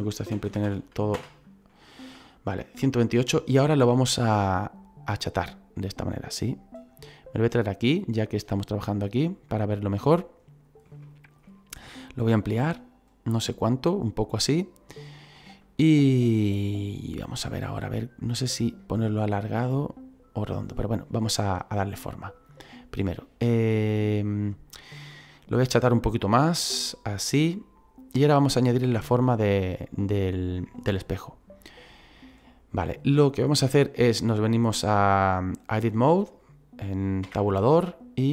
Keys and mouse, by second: 0.3 KP_1, 0.4 KP_2, 0.6 KP_8, 4.0 click, 5.2 click, 7.6 click, 9.5 middle click, 11.0 middle click, 12.6 s, 13.8 click, 15.3 middle click, 22.3 click, 26.0 click, 29.7 shift+middle click, 37.2 Tab.